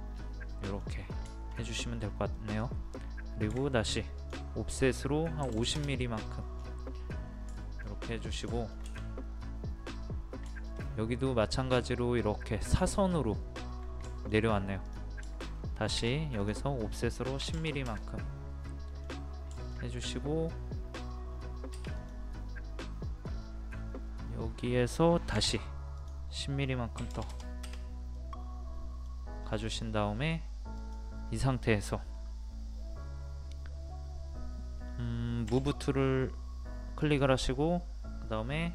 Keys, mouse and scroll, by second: 0.5 middle click, 1.7 scroll up 1, 2.3 middle click, 3.5 o, 4.1 click, 5.4 KP_5, 6.4 middle click, 6.4 scroll down 1, 7.5 shift+middle click, 7.8-8.2 scroll down 1, 8.6 shift+middle click, 14.1 shift+middle click, 14.5-14.8 scroll up 1, 14.8 click, 15.3 shift+middle click, 16.4 click, 17.4 KP_1, 18.6 middle click, 19.0-19.5 scroll down 1, 19.5 shift+middle click, 21.3-21.7 scroll up 1, 21.9-23.1 drag, 25.3 o, 26.0 click, 27.0 KP_1, 28.1 middle click, 29.4-30.7 scroll up 1, 30.7 click, 35.5 m, 37.0-38.0 drag.